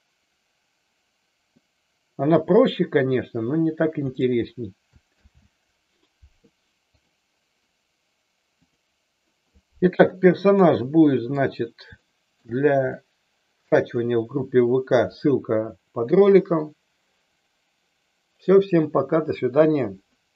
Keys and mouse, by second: 4.0 click, 5.0 ctrl+z, 6.8 click, 10.6-11.3 middle drag, 12.0-12.4 shift+middle drag, 12.9-13.7 middle drag.